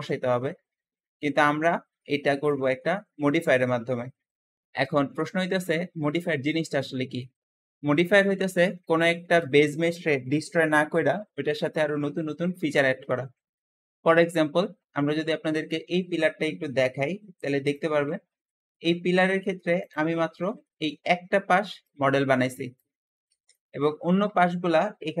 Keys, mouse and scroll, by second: 3.3-4.4 scroll up 2, 4.4-7.3 shift+middle drag, 7.3 scroll up 1, 8.9-12.6 shift+middle drag, 12.6-13.3 scroll up 1, 13.3 shift+middle click, 17.6 click, 18.4-19.7 middle drag, 19.7 click, 20.5 middle click, 21.0-21.5 scroll down 2, 21.5 `, 23.2 Escape, 23.4-25.2 middle drag.